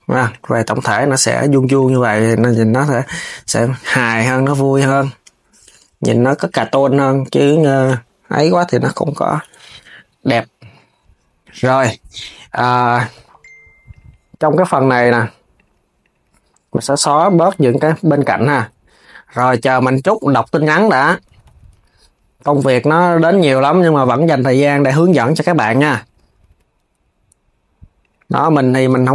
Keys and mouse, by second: 1.4 click, 1.6 KP_3, 2.0 g, 4.4 click, 6.0 click, 6.2 KP_3, 6.6 g, 13.6 click, 14.7 shift+click, 15.2 shift+click, 15.7 shift+click, 16.8 shift+click, 17.5 shift+click, 17.9 x, 20.4 KP_3, 21.0 s, 24.5-25.6 drag, 25.7 KP_3, 26.1 g.